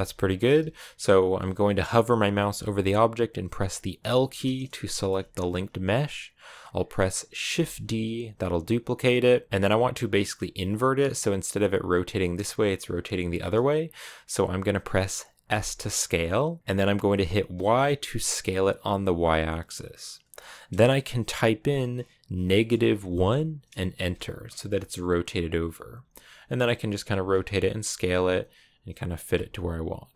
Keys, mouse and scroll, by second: 3.8 l, 4.7-7.4 shift+middle drag, 7.4 shift+d, 15.3 s, 25.8-27.7 typing, 29.0 a.